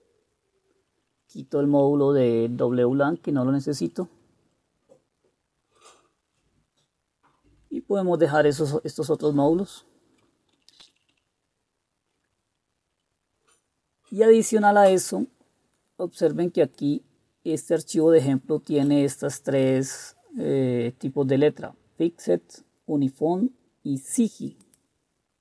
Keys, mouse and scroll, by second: 1.4 Right, 1.6 Right, 2.7 Delete, 2.9 Delete, 3.2 Delete, 3.5 Delete, 3.9-5.2 Delete, 4.5 Right, 5.2 Right, 5.3 Right, 5.3-7.1 Right, 7.7 typing, 8.4-10.2 Left, 10.7 Down, 10.8 Down, 11.0 Down, 11.2-12.1 Down, 13.0 Up, 13.6-14.7 Up, 14.8 Up.